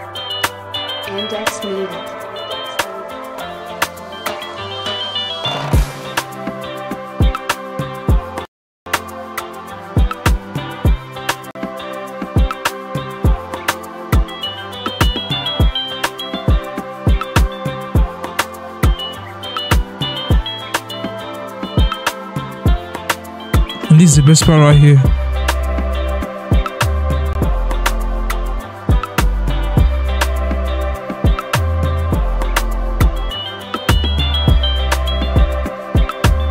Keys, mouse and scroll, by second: 5.1 Escape.